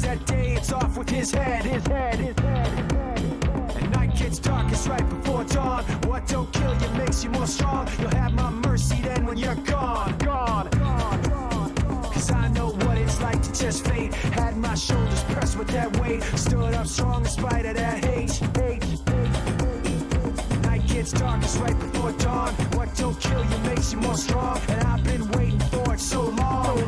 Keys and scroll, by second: 1.2-2.0 typing, 22.3-23.7 typing, 25.9 s.